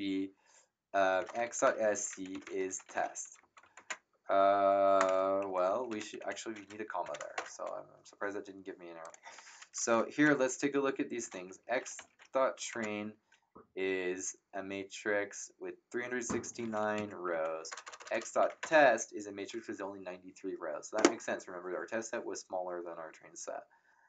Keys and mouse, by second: 0.9-3.4 typing, 3.7 ctrl+Return, 3.7 Num_Lock, 5.4 Up, 5.9 End, 6.1 Left, 7.0 <, 7.3 Return, 9.0-13.1 typing, 9.0 click, 16.9 Up, 17.3 Left, 17.7-19.0 typing.